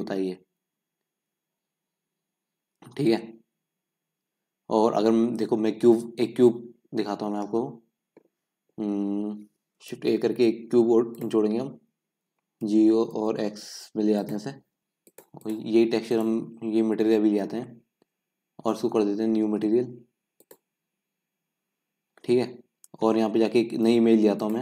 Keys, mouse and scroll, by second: 0.5-3.5 scroll down 1, 3.5-5.0 scroll down 1, 5.0-5.6 scroll up 1, 5.6-6.4 scroll up 1, 6.4-6.8 scroll down 1, 9.7 click, 11.3 shift+a, 12.4 g, 14.8-16.0 middle drag, 16.0-24.6 drag.